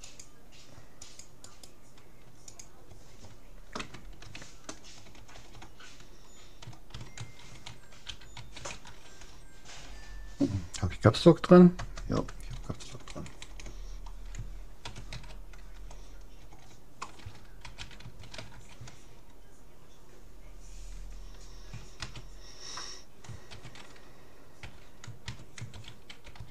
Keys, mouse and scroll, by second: 1.4-3.2 right drag, 5.2 BackSpace, 12.8 BackSpace.